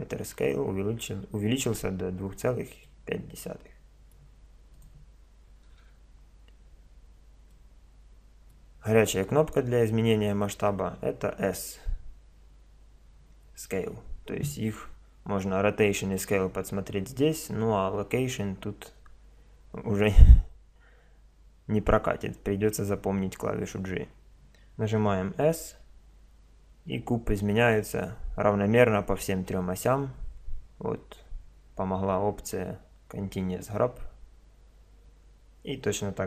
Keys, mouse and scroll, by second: 2.9-4.7 middle drag, 4.7-6.5 drag, 7.5-9.4 middle drag, 25.5 s.